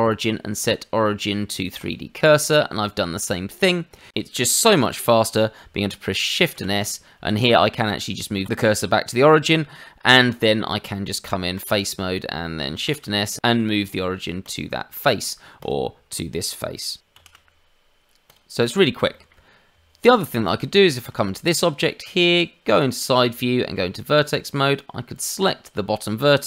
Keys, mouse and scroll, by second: 2.4 middle click, 4.1 shift+middle click, 6.5 shift+s, 10.4 middle click, 10.8 Tab, 11.7 click, 12.0 middle click, 12.8 shift+s, 14.9 middle click, 15.5 click, 17.1 shift+s, 18.6 scroll down 1, 19.1 shift+middle click, 19.7 Tab, 20.4 click, 20.8 shift+middle click, 21.1-22.2 scroll up 2, 22.2 click, 22.7 shift+middle click, 23.2 Tab, 25.1 click.